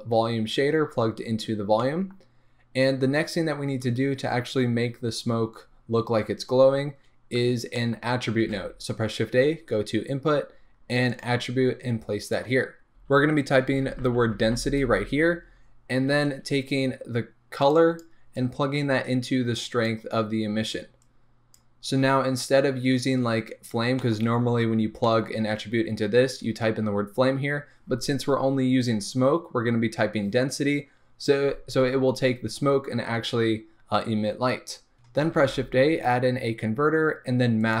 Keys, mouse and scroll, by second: 18.0 click.